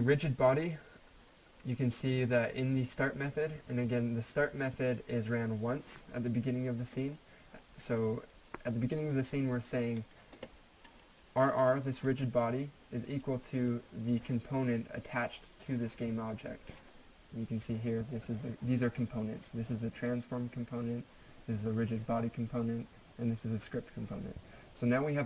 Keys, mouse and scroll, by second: 8.6-11.1 drag, 13.5 click.